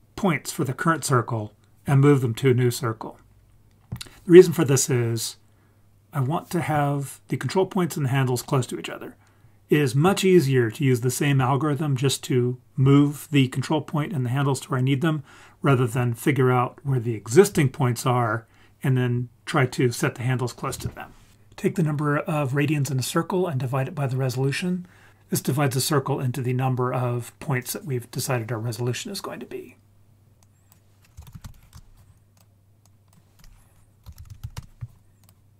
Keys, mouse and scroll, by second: 30.4-31.7 drag, 32.8-34.5 drag, 35.2 click.